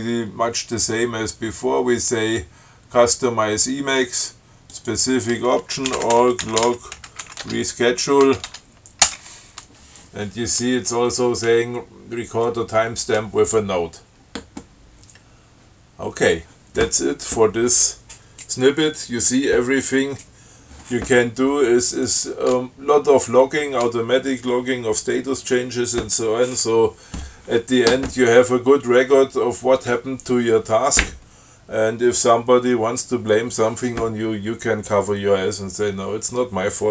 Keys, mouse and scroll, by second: 5.0 click, 5.9-8.5 typing, 8.8 Tab, 9.3 Return, 16.5 click, 22.3 click.